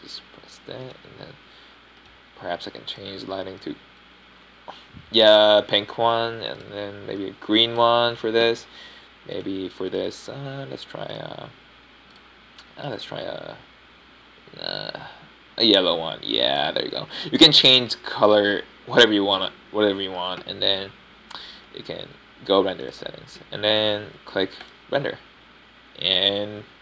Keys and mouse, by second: 0.0 middle click, 0.2 middle click, 2.1 click, 4.9 middle click, 7.1-8.5 right drag, 8.5 middle click, 9.3 middle click, 9.9 middle click, 11.3 click, 13.1-13.8 middle drag, 18.9-19.3 middle drag, 20.8 middle drag, 21.0-21.4 middle drag, 24.8-25.3 middle drag.